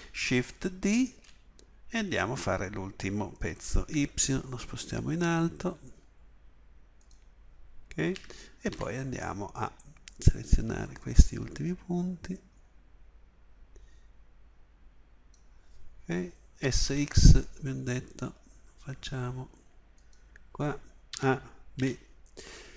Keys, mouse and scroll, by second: 0.9 shift+d, 8.2 a, 8.7 b, 16.6 s, 21.1 a, 21.7 b.